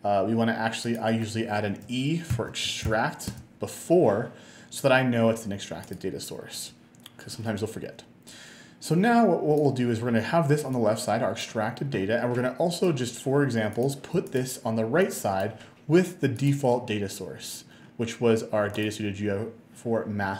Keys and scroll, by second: 2.4 space, 2.9 -, 3.3 space.